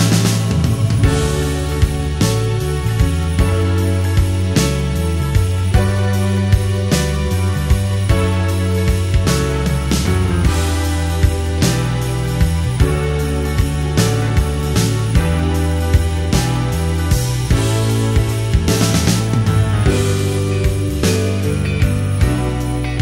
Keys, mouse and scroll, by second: 14.4 shift+middle click, 19.2-20.6 drag, 21.5 click, 22.3-23.0 drag.